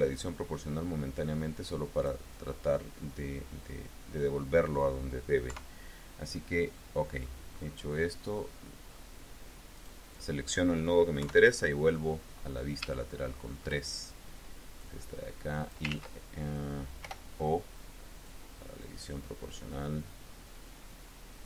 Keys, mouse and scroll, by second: 5.3 KP_3, 6.6 click, 7.4-7.8 scroll up 1, 7.9-9.0 drag, 9.6 click, 11.0 KP_3, 11.8-12.3 scroll up 1, 12.8 shift+click, 14.6-15.8 drag, 15.7 ctrl+z, 16.8 o, 18.1-21.4 drag.